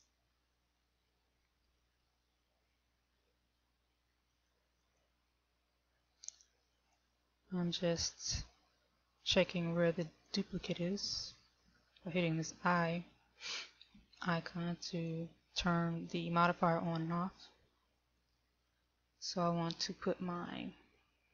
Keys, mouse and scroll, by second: 0.8 shift+middle click, 4.4 click, 5.1 click.